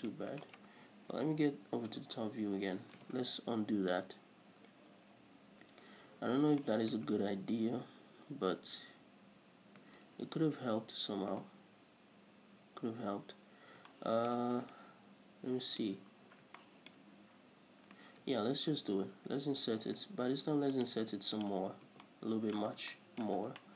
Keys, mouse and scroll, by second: 1.5 KP_7, 2.3-2.9 scroll up 1, 5.6 ctrl+z, 6.6-9.2 middle drag, 6.6 scroll up 1, 10.5 ctrl+z, 13.9-14.3 scroll down 2, 14.3 shift+middle click, 14.9 scroll down 2, 15.1-21.2 shift+middle drag, 16.3 scroll up 1, 17.5-17.9 scroll up 1, 18.7 f, 21.2 shift+click, 21.3 x, 22.0 scroll down 2, 22.2 Tab, 22.4-23.7 middle drag, 23.1 scroll down 2.